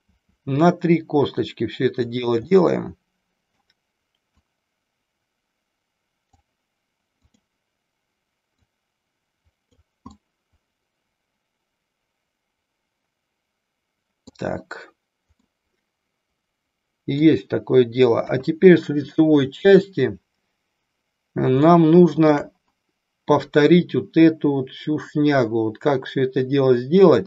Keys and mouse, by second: 0.1 e, 2.1 click, 2.5-3.7 middle drag, 4.5-6.5 drag, 7.2 click, 8.6-9.7 drag, 10.1-14.5 middle drag, 15.4-17.4 middle drag, 18.4 KP_1, 21.7 shift+middle click.